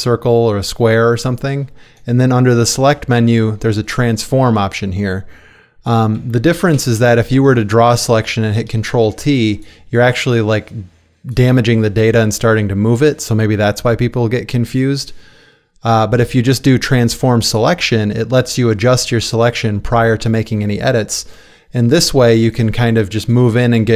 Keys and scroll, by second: 6.8 Escape, 8.8 ctrl+t, 14.5 Escape, 22.2 space.